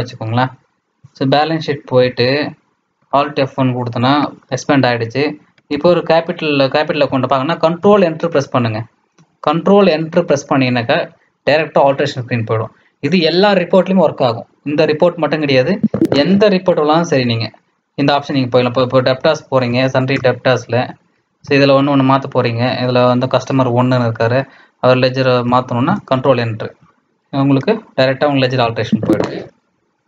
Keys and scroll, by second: 1.9 Right, 2.2 Down, 3.0 alt+F1, 5.6 Left, 5.9 Up, 7.7 ctrl+Return, 15.4 Escape, 15.7 Escape, 16.1 Escape, 18.3 Right, 18.5 Down, 18.6 Down, 18.8 Down, 18.9 Down, 19.0 Down, 19.1 Down, 19.2 Down, 19.6 Down, 20.1 Return, 21.1 Down, 25.8 ctrl+Return, 28.6 Escape, 28.8 Escape, 29.1 Escape, 29.7 Escape.